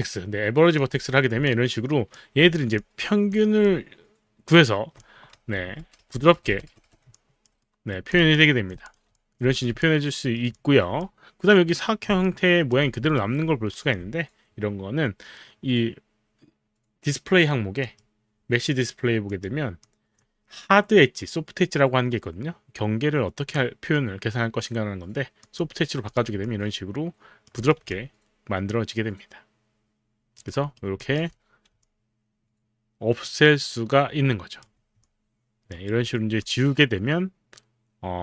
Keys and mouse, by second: 0.8 click, 1.4 alt+click, 2.5 alt+middle click, 2.7 alt+click, 3.1 alt+click, 3.1 alt+middle click, 3.6 alt+click, 4.2-5.8 alt+drag, 5.8 g, 6.1 g, 7.1 alt+click, 8.0 right click, 8.0 alt+click, 8.3 alt+click, 9.1 alt+click, 9.2 alt+click, 9.8 alt+click, 12.2 alt+click, 13.3 alt+right click, 13.8 alt+click, 17.8 click, 19.3 click, 19.8 click, 25.5 click, 26.1 click, 27.6 click, 30.0 alt+click, 30.4 alt+right click, 30.9 alt+click, 31.8-35.0 alt+drag, 36.1 alt+middle click, 36.5 alt+click, 36.5 alt+middle click.